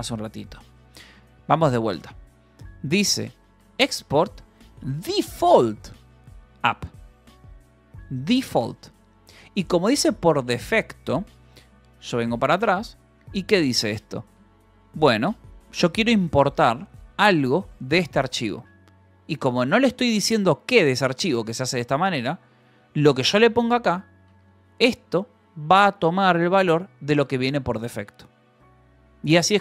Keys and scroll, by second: 0.0-7.4 typing, 4.1 Escape, 7.9 Escape, 13.0-15.2 typing, 16.4 v, 17.2 e, 17.3 Escape, 17.7 v, 18.3 e, 18.9 Escape, 19.4 h, 20.7-24.9 typing, 25.3 Escape.